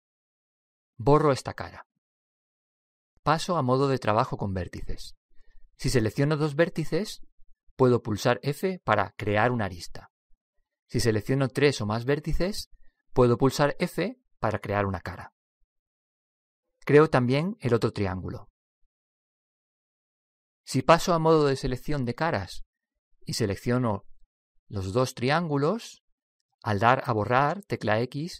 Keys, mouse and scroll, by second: 1.6 x, 4.9 click, 6.8-9.6 right drag, 9.1 f, 9.5-12.0 middle drag, 12.3-14.1 right drag, 14.1 f, 15.5-17.4 middle drag, 17.6-20.3 right drag, 19.6 f, 22.6 click, 24.7-26.6 right drag, 26.0-27.9 middle drag.